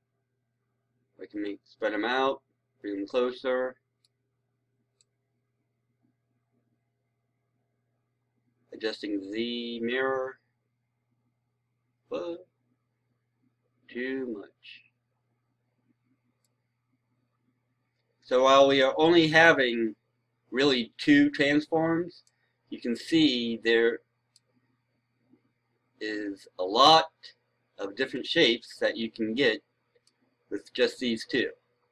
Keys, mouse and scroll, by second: 22.1-24.9 right drag, 24.9-26.0 scroll up 1, 26.8 scroll down 1, 28.0-30.0 right drag, 30.7-31.1 scroll up 1.